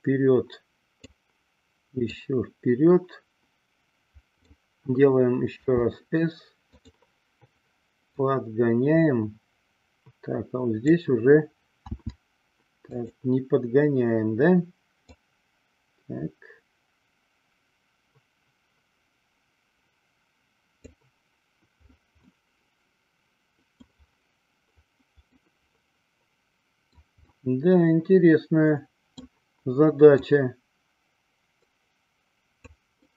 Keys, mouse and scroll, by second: 2.2-4.7 drag, 5.7 s, 8.4-11.2 drag, 12.0 s, 13.2 click, 15.1-21.1 drag, 22.5-24.1 middle drag, 25.6-27.2 middle drag, 27.6-29.5 middle drag, 30.4-33.0 drag.